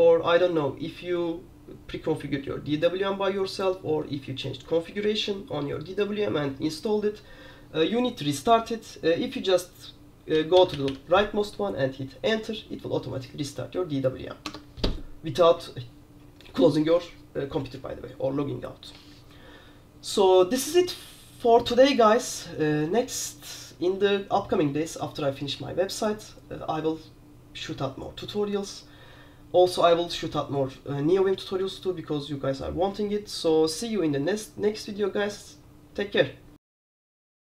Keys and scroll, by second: 10.2-11.4 typing, 14.6 Escape.